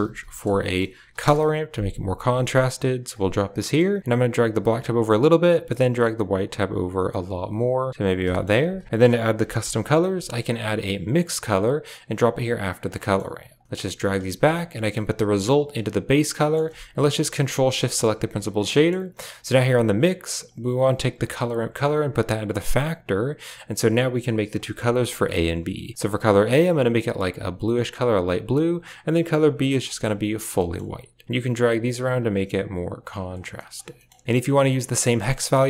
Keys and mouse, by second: 2.5 click, 3.5 middle click, 4.1 click, 5.6-8.0 drag, 8.2 middle click, 8.5 shift+a, 12.1 click, 12.6 click, 12.9 middle click, 13.6 click, 13.6 middle click, 13.8 g, 14.2 a, 14.6 click, 15.1 click, 15.2 click, 16.2 middle click, 17.4 ctrl+shift+click, 17.7 middle click, 18.3 drag, 18.6 middle click, 20.4 click, 21.7-22.6 drag, 24.5 middle click, 25.0 click, 28.7 click, 30.4 middle click, 31.2-32.0 drag, 32.5 click, 33.5 middle click, 33.8 middle click, 34.2 ctrl+v, 34.2 middle click, 34.9 middle click, 35.6 click.